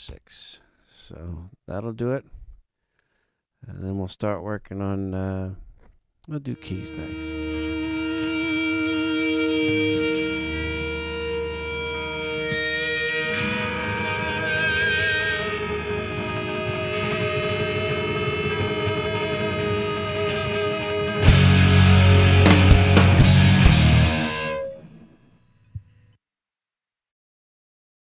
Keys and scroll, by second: 0.0 Return.